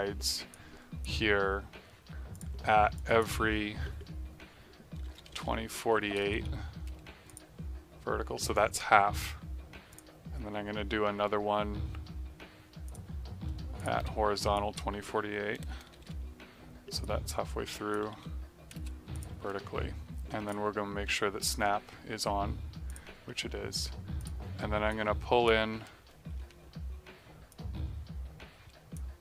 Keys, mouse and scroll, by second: 5.0 KP_2, 5.1 KP_0, 5.2 KP_4, 7.2 click, 9.8 click, 12.8 click, 15.5 KP_2, 15.6 KP_0, 15.9 KP_4, 16.0 KP_8, 17.0 click, 18.0 KP_4, 18.1 KP_8, 18.7 space, 19.1 click, 22.8 click, 26.5 v, 27.4 click.